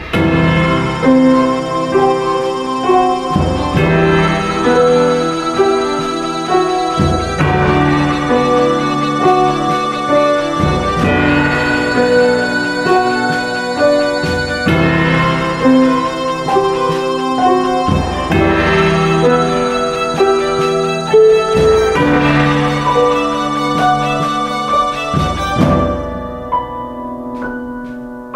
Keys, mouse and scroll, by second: 0.9 ctrl+t, 8.1 ctrl+space.